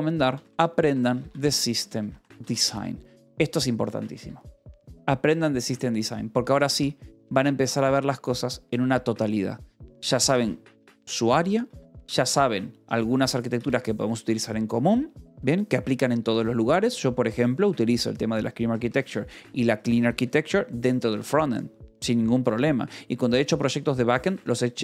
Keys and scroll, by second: 0.0-3.2 typing, 4.1 Escape, 7.0 shift+v, 8.0 Escape, 9.9 k, 10.8 shift+v, 11.6 Escape, 11.9 j, 12.8 ctrl+shift+v, 13.0 Escape, 13.2 u, 14.0 shift+v, 15.6 Escape, 17.5 l, 18.4 v, 19.0 Escape, 19.2 l, 20.3 Escape, 23.3-24.8 typing.